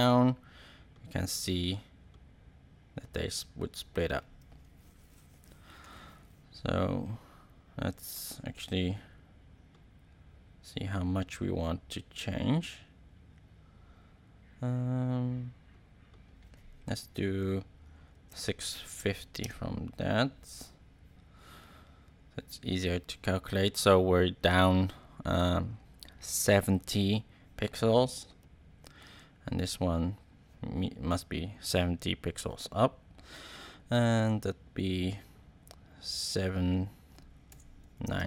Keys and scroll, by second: 4.8 super+z, 17.8-18.8 typing, 19.4 Home, 36.2 7, 37.4-38.2 typing.